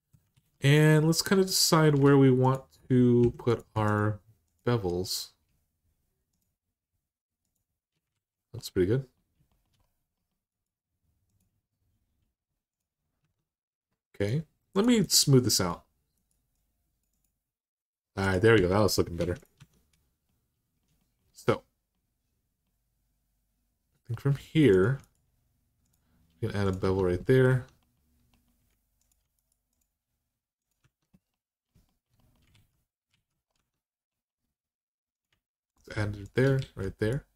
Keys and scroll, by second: 0.1 alt+z, 3.0 2, 7.9 alt+z, 13.0 Tab, 18.3 Tab, 19.0 Tab, 19.4 Tab, 26.6 Tab, 27.3 Tab, 30.6 Tab, 32.3 alt+z, 32.9 alt+z, 33.3 Tab, 36.4 alt+z.